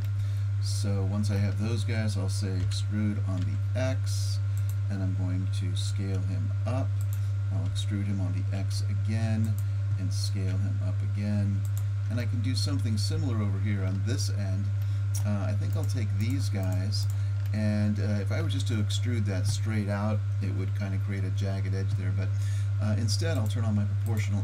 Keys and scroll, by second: 2.6 e, 5.9 s, 7.7 e, 10.5 s.